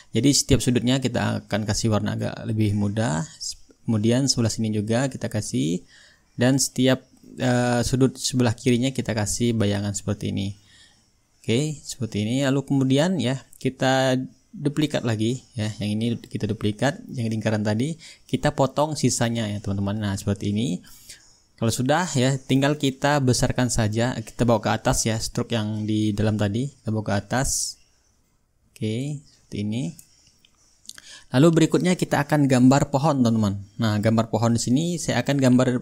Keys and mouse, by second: 1.7-3.4 drag, 4.1-12.0 drag, 12.3-15.0 drag, 13.8-15.0 right drag, 15.0-16.1 drag, 17.6-18.7 shift+drag, 18.8-19.9 drag, 20.0-21.2 drag, 21.3-23.7 shift+right drag, 22.2-24.8 drag, 26.0-27.1 drag, 28.2-29.3 drag, 31.4-32.5 drag.